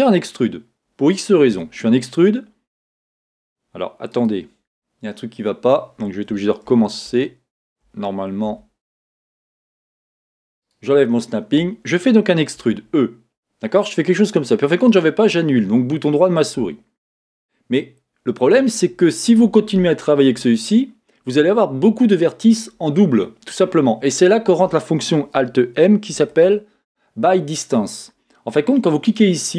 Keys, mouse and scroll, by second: 1.5 e, 6.7 z, 8.5 a, 10.6-12.6 drag, 12.6 e, 29.2 alt+m.